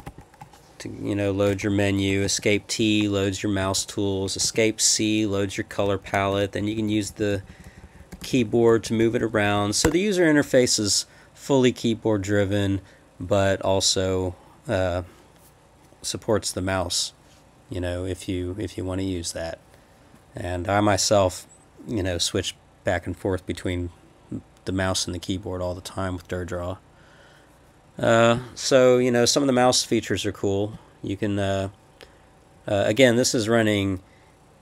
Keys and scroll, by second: 0.0 Escape, 0.0 m, 1.5 Escape, 2.1 Escape, 2.2 t, 3.6 Escape, 4.2 Escape, 4.4 c, 6.1 Right, 6.1 Left, 6.3 Up, 6.6 Left, 6.8 Left, 6.9 Left, 7.1 Left, 7.2 Down, 7.3 Left, 7.5 Left, 7.6 Left, 7.8 Left, 8.0 Left, 8.1 Up, 8.2 Left, 8.4 Left, 9.0 Left, 9.5 Right, 9.8 Return.